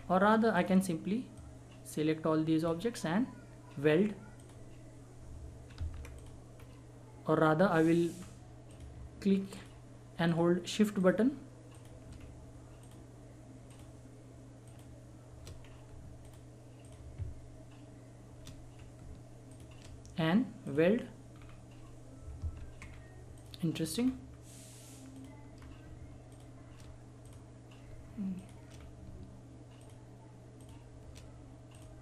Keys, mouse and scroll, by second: 0.5-4.0 drag, 6.1 click, 6.5 scroll up 1, 8.6 click, 9.5 shift+click, 12.2 scroll up 1, 12.8 shift+click, 15.6 scroll up 1, 16.2 click, 18.7 scroll up 1, 19.4 click, 21.3-22.0 scroll down 1, 22.8 scroll down 1, 23.3 click, 23.9 scroll up 1, 25.1 click, 25.5 scroll up 1, 26.3 shift+click, 28.3 shift+click, 28.7 scroll down 1, 29.8 shift+click.